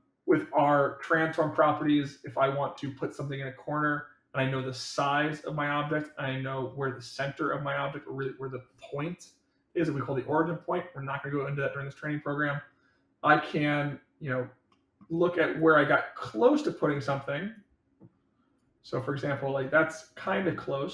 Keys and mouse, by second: 2.3-4.4 middle drag, 6.2-6.7 middle drag, 14.6 middle click, 15.5-16.8 drag, 17.5-18.5 drag, 19.2 click, 20.4-20.9 middle drag.